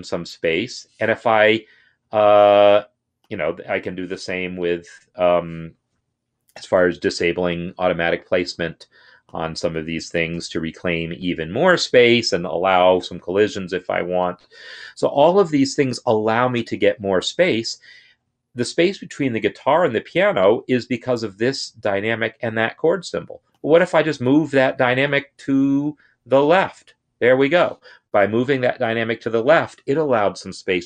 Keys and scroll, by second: 4.3 Up, 7.3 =, 10.3 =, 24.3 Left, 24.6 Left, 26.4 ctrl+Left.